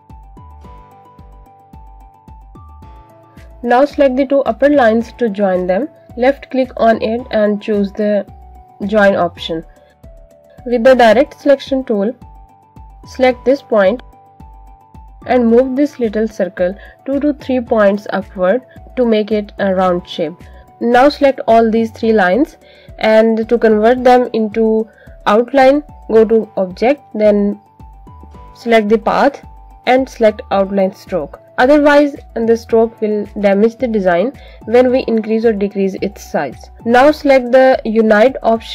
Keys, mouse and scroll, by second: 0.5 click, 2.4 click, 3.2 click, 5.2 shift+click, 7.8 right click, 9.2 click, 24.3 shift+click, 25.6 shift+click, 26.9 click, 31.7 click.